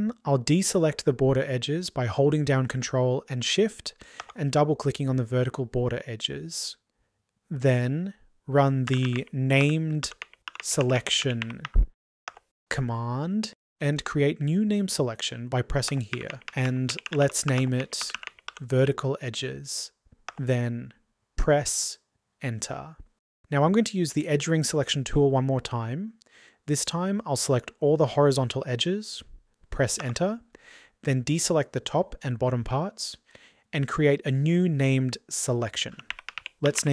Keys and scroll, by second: 6.9 typing, 12.0 typing.